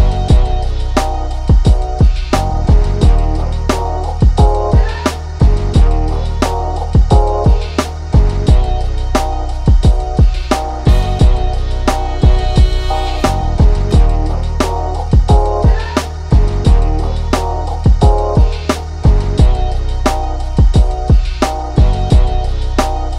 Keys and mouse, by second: 4.7 click, 16.9-17.7 drag, 17.7 shift+a, 19.6-23.1 drag.